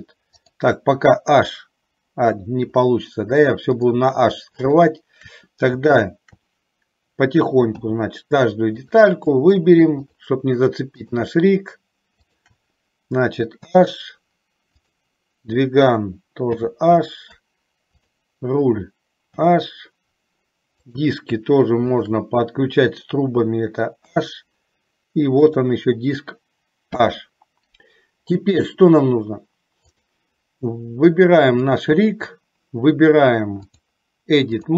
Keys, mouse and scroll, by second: 0.4 click, 7.8 h, 9.0 click, 10.2 shift+click, 11.2 shift+click, 12.3 shift+click, 13.7 h, 16.5 h, 17.2 middle click, 18.0 click, 19.4 h, 22.1 shift+click, 24.2 h, 25.6 click, 27.1 h, 33.8-34.7 drag.